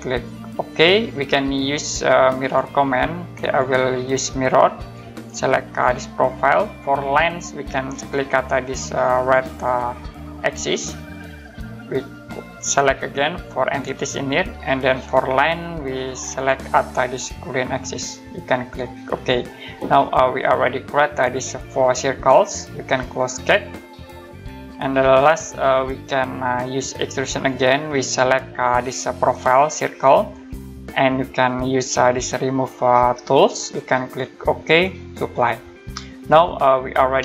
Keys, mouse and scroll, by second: 0.6 click, 2.4 click, 7.7 click, 10.5 click, 13.5 click, 17.8 click, 23.4 click, 27.3 click, 29.8 click, 33.8-34.3 scroll down 1, 35.2 click, 35.9 middle click.